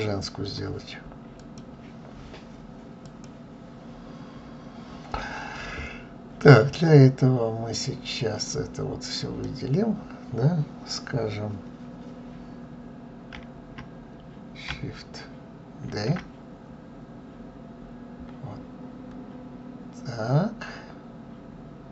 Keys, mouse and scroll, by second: 7.9 drag.